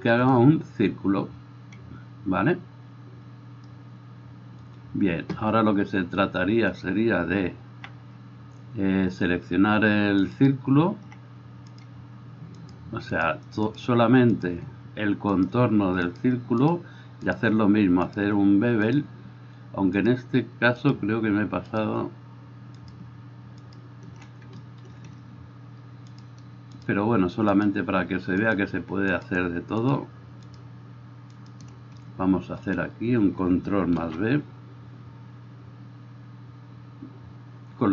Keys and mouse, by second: 6.9-18.2 drag, 11.8 middle click, 11.8 right click, 12.8-18.2 shift+middle drag, 12.8-18.2 shift+right drag, 23.1-26.9 shift+drag, 28.5-37.9 shift+drag, 28.5 shift+middle click, 28.5 shift+right click, 29.2-31.6 shift+middle drag, 29.2-31.6 shift+right drag, 34.1 ctrl+b.